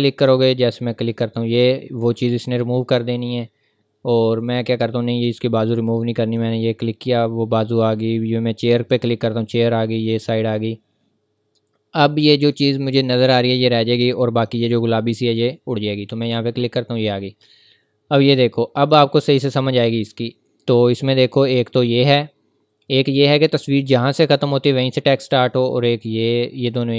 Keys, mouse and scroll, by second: 4.5 click, 14.1 click, 25.5 click.